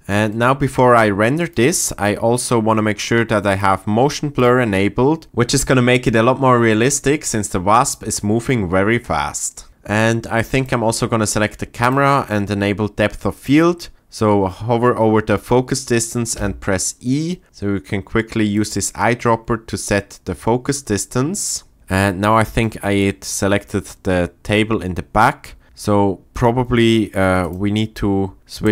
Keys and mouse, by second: 1.2 shift+click, 3.5 click, 10.5 click, 11.8 click, 13.4 click, 16.3 e, 18.5 click, 22.2-22.9 shift+middle drag.